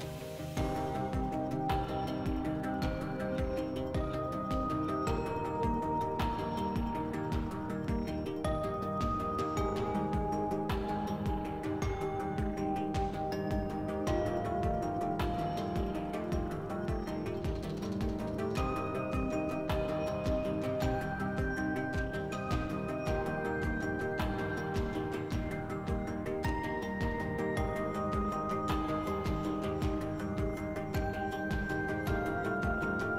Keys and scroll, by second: 15.3 d, 16.1 s, 17.9-18.8 typing, 22.6 s, 24.5 4.